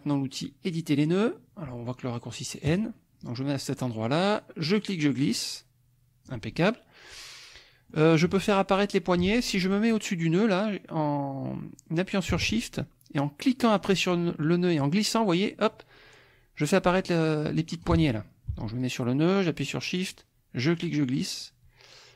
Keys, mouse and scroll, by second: 2.7 click, 4.7-6.4 drag, 6.5-8.0 middle drag, 8.9-11.1 drag, 13.8-18.0 shift+drag, 20.1-22.1 shift+drag.